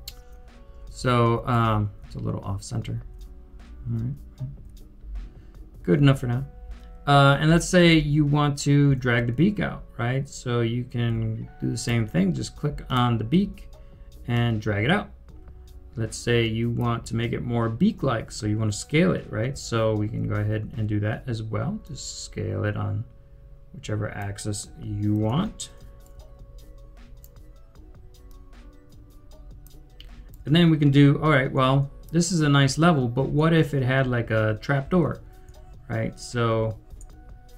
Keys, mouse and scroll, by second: 0.4-7.2 typing, 9.4-10.6 typing, 11.8 typing, 19.9 typing, 21.6-22.3 typing, 25.0-27.1 typing, 26.0 right click, 29.2 typing, 30.2-31.6 typing, 30.2 right click, 33.2-33.6 typing, 36.0-37.5 typing.